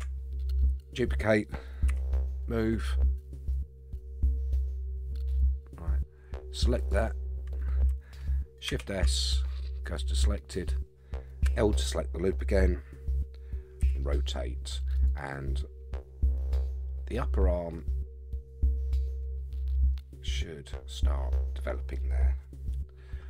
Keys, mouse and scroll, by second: 1.9 g, 6.8 click, 8.7 shift+s, 11.4 l, 13.8 r, 17.0 scroll down 4, 17.8-22.0 middle drag, 22.7 KP_3.